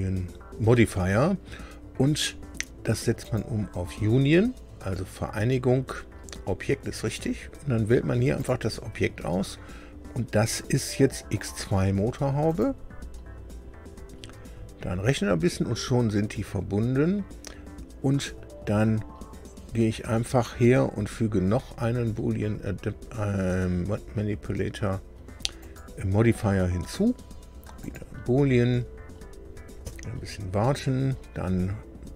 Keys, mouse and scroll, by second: 3.2 right click, 8.3 click, 12.4 click, 25.6 click, 27.8 click.